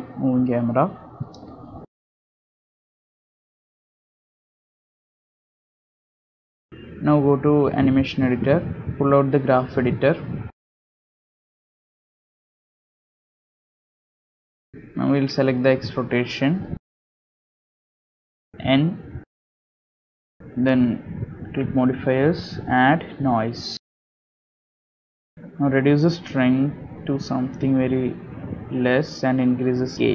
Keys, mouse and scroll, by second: 19.9-20.5 scroll down 14, 19.9 KP_Decimal, 23.7 click, 24.4 click, 26.0-26.7 scroll down 9, 26.8 middle click, 27.9 click, 29.5 shift+click.